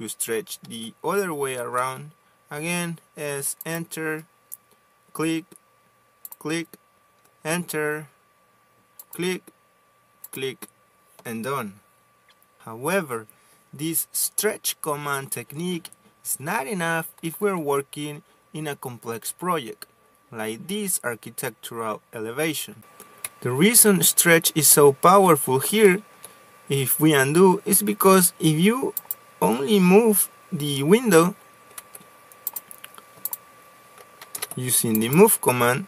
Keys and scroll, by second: 1.4 s, 2.5 space, 8.0 space, 22.7 space, 23.7 Escape, 29.9 ctrl+z, 31.0 ctrl+z.